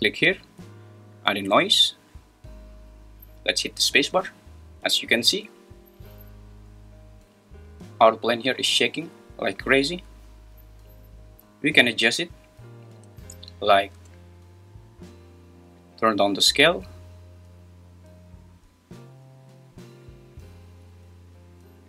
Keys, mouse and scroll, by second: 0.0-1.8 drag, 3.9 space, 12.9 space, 15.8-20.9 drag.